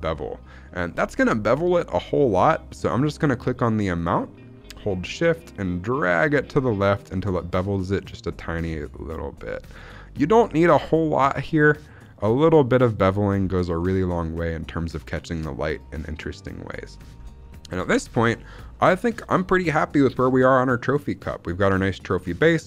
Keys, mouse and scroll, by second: 0.4 middle click, 0.8-2.3 scroll up 1, 2.3-3.5 scroll down 1, 3.8-11.9 drag, 12.3-12.9 scroll up 2, 13.1 middle click, 13.2-13.7 scroll down 2, 13.7-16.8 middle drag, 17.0-17.5 scroll down 2, 17.1 shift+middle drag, 17.5 middle drag, 17.9 shift+middle drag, 18.1 scroll up 1, 18.3 middle click, 18.6 shift+middle click, 18.9-19.4 scroll down 2, 19.4-19.7 middle drag, 19.7 scroll up 2, 20.0 shift+middle click, 20.2-21.5 middle drag, 22.1-22.6 middle drag.